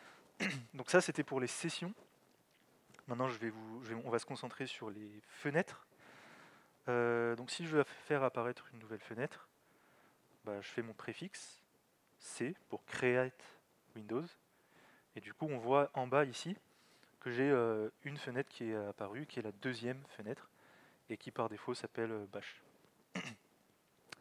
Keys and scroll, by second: 10.9 alt+x, 12.3 c.